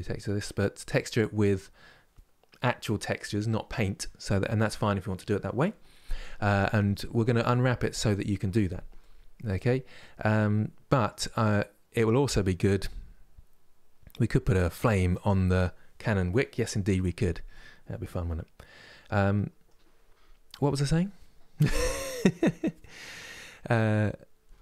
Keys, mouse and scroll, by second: 17.7-24.6 middle drag.